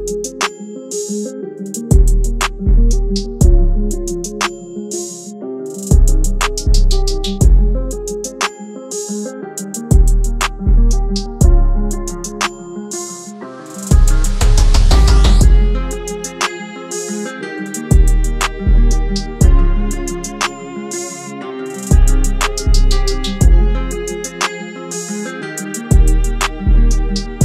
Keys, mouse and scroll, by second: 7.4 e.